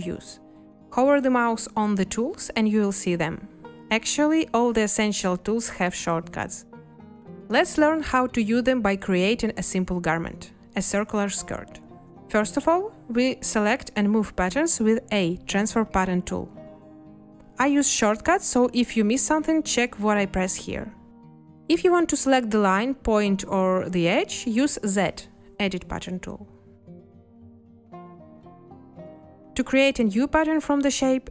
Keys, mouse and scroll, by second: 14.9 a, 19.9 a, 20.8 a, 21.0 a, 21.2 a, 24.9 z, 27.2 Escape, 29.3 Escape.